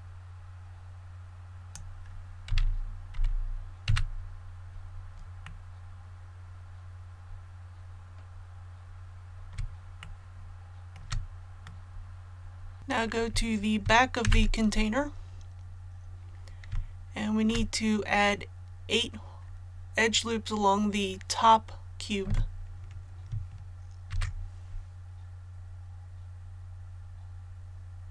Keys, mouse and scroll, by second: 2.5 z, 3.1 z, 3.8 a, 4.6 scroll down 1, 5.4-9.5 middle drag, 10.0 shift+middle click, 11.6 middle click, 12.8 click, 14.2 KP_1, 15.6-16.0 scroll up 1, 16.7 shift+middle click, 16.8 shift+scroll up 1, 24.1 ctrl+r, 25.5-28.1 scroll up 1.